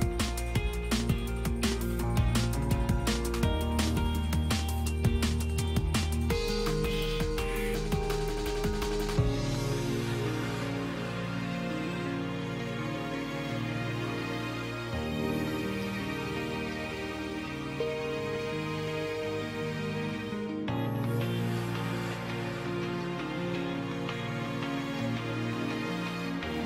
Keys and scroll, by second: 0.7 space, 2.8 space, 4.4 space, 9.9 space, 16.5 space.